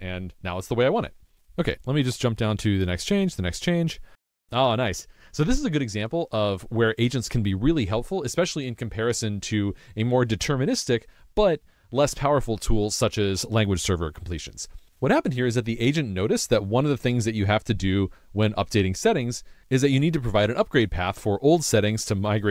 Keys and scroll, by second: 0.0 Down, 0.6 super+BackSpace, 1.0 super+s.